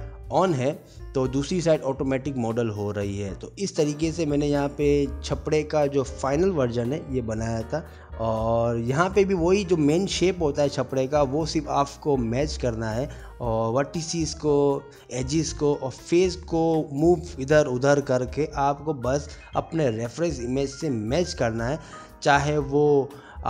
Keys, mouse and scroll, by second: 0.5 ctrl+r, 0.9 middle click, 1.2 click, 1.3 middle click, 1.5 g, 2.0 shift+middle click, 2.1 click, 2.3 g, 2.7 middle click, 2.8 ctrl+r, 3.4 Escape, 3.5 ctrl+r, 3.7 click, 3.8 g, 4.2 middle click, 5.0 shift+middle click, 5.2 3, 5.3 shift+middle click, 5.3 click, 5.4 click, 5.6 click, 5.7 middle click, 6.0 middle click, 6.3 middle click, 6.3 1, 6.5 click, 6.6 g, 6.9 middle click, 7.5 x, 7.6 middle click, 7.8 ctrl+z, 8.0 click, 8.1 2, 8.2 ctrl+x, 8.2 click, 8.4 click, 9.0 middle click, 10.0-11.4 ctrl+z, 11.4 middle click, 11.8 middle click, 12.0 ctrl+r, 12.6 click, 12.8 middle click, 12.9 g, 13.3 click, 13.5 ctrl+z, 13.6 ctrl+z, 13.7 g, 14.0 click, 15.9 Tab, 16.0 middle click, 17.3 Tab, 17.5 click, 17.7 2, 17.9 shift+click, 18.1 shift+click, 18.3 middle click, 18.6 e, 23.4 middle click.